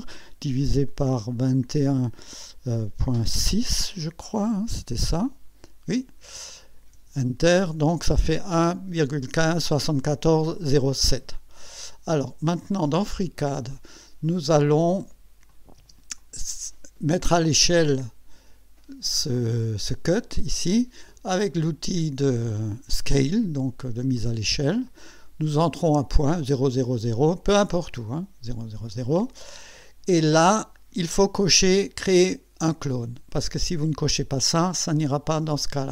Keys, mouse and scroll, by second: 1.3 2, 1.6 1, 3.0 ., 3.3 6, 5.2-6.3 drag, 6.9 Return, 12.7 click, 15.5 click, 15.8 space, 16.2 click, 17.4-17.7 scroll up 2, 17.9-18.3 scroll up 2, 24.2 click, 27.9 click.